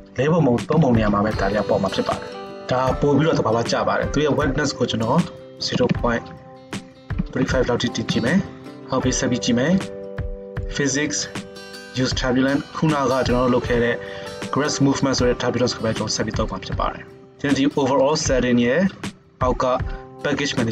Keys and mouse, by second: 8.7-10.6 middle drag, 10.6-11.9 drag, 11.9-13.3 middle drag, 13.3-20.7 drag.